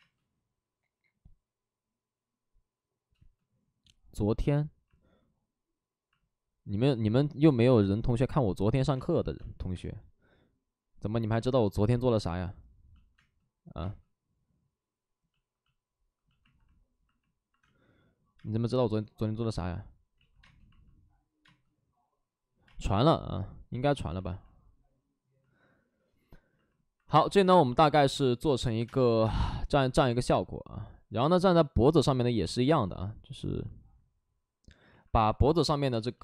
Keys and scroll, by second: 3.0 space, 8.8 space, 9.3 space, 9.6 space, 11.2 space, 13.1 space, 17.5 space, 18.3 space, 20.0 ctrl+z, 20.3 space, 21.3 space, 28.7 3, 28.7 space, 29.1 3, 34.5 space, 35.8 space.